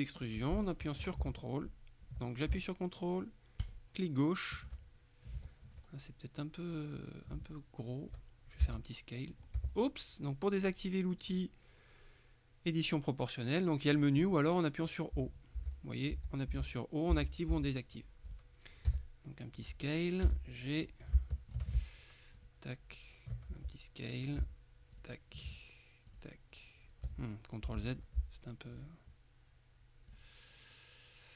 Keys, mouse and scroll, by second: 3.7 click, 6.0-6.4 ctrl+scroll up 1, 8.8 s, 9.7 Escape, 11.4 click, 14.0 click, 15.2 o, 16.6 o, 17.6 o, 19.0 s, 19.6 click, 20.3 g, 20.8 click, 21.3 shift+middle click, 22.5 ctrl+click, 23.6 s, 24.3 ctrl+click, 25.0 ctrl+click, 26.2 click, 27.2 z, 28.8 click, 30.2 click.